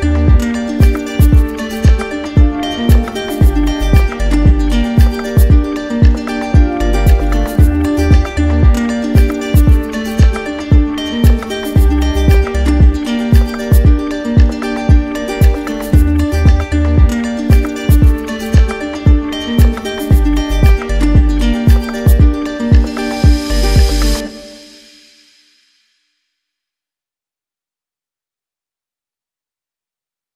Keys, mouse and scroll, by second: 0.7 shift+click, 2.0 shift+click, 2.7 shift+click, 5.3 click, 6.0 ctrl+z, 7.3 click, 9.0 shift+click, 9.7 shift+click, 10.1 shift+click, 10.5 shift+click, 11.0 shift+click, 11.3 shift+click, 12.0 shift+click, 13.3 shift+click, 14.5 alt+right click, 16.0 shift+click, 16.5 shift+click, 16.9 shift+click, 17.2 shift+click, 17.9 ctrl+z, 18.4 ctrl+z, 18.6 ctrl+z, 19.2 ctrl+z, 20.9 alt+right click, 24.3 middle click, 24.8 middle click, 25.3 middle click, 27.3-28.4 middle drag, 30.0-30.3 middle drag.